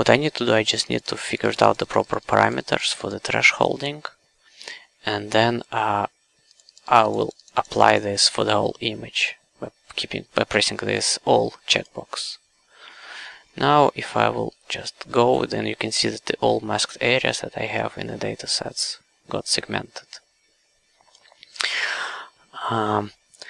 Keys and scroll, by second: 14.5 q.